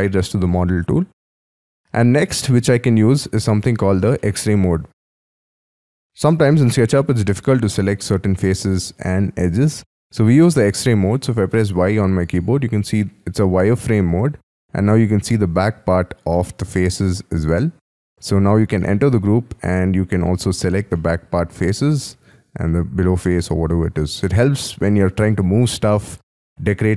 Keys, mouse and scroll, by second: 0.1-2.0 scroll down 2, 2.0-2.6 scroll down 5, 2.6 scroll up 3, 3.5 scroll down 4, 4.3 shift+middle click, 5.7 y, 6.0-6.5 scroll down 6, 6.5-6.8 scroll up 4, 6.8 middle click, 8.1 scroll down 4, 9.7 scroll down 5, 10.2 scroll up 5, 11.7 y, 12.4-12.8 scroll down 4, 12.9-13.8 scroll up 4, 13.8 scroll down 5, 14.4 middle click, 15.4 scroll up 5, 16.3 middle click, 18.3 double click, 18.8 middle click, 19.8 middle click, 20.9 middle click, 22.6 middle click, 23.4-24.2 scroll down 8, 24.2-26.9 scroll up 5.